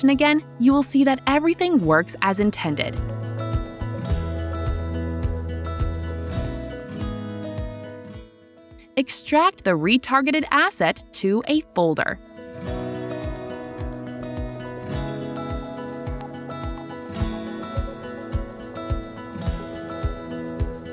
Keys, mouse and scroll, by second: 4.9 right click, 4.9 typing, 6.8-8.1 right drag, 8.7 click, 10.3 right click, 11.3 click, 15.9 click, 15.9 typing, 18.9 click, 20.1 click.